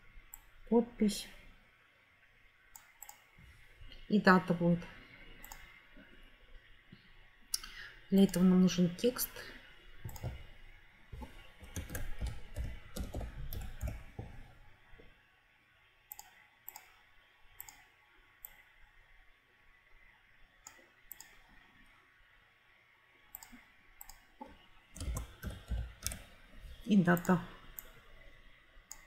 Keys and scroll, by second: 11.6-14.2 typing, 24.7-26.5 typing.